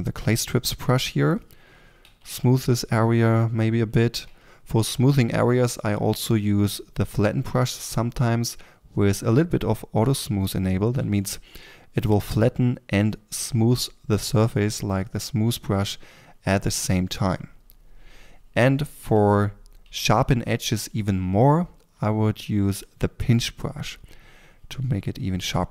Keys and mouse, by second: 2.0 f, 2.3 click, 4.7 f, 5.8-7.6 drag, 10.9 f, 12.1-23.3 drag, 15.4 f, 19.7 f, 23.5-25.7 drag.